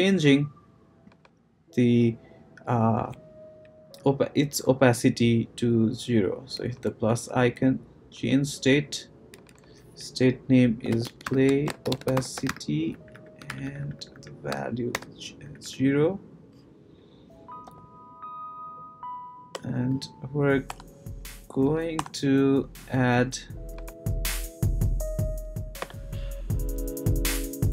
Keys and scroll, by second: 10.6-13.0 typing, 14.9 shift+0, 15.4 Right, 17.7 ;, 19.5 Return, 20.7 BackSpace, 21.9 BackSpace, 25.1 Down, 25.8 Return.